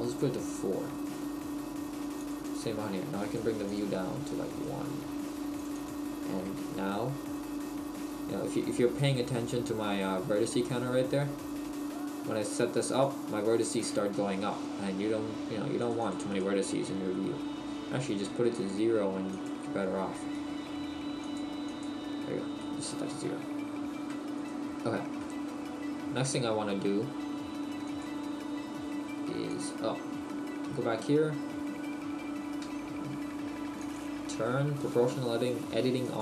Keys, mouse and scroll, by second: 0.2 click, 0.9 right click, 3.4 click, 3.8 click, 4.6 right click, 5.7 click, 6.2 click, 6.9 middle click, 13.7 click, 20.2 right click, 21.9 click, 22.5 scroll down 1, 22.6 middle click, 24.6 right click, 25.2 middle click, 26.1 middle click, 29.6 click, 33.8 click.